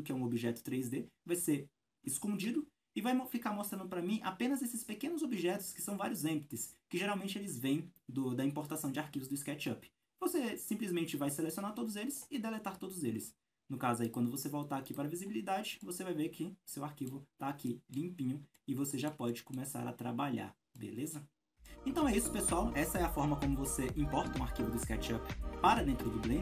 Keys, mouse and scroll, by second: 1.8-3.2 scroll down 1, 3.2 scroll up 2, 3.3 a, 3.9 scroll down 2, 4.2-6.6 scroll up 1, 6.6-7.6 scroll down 1, 8.7-12.2 scroll up 1, 12.2 scroll down 1, 12.2 x, 15.5 scroll up 1, 15.8-20.7 middle drag, 18.1-18.5 scroll up 2, 20.8 middle click, 22.2-26.4 shift+middle drag.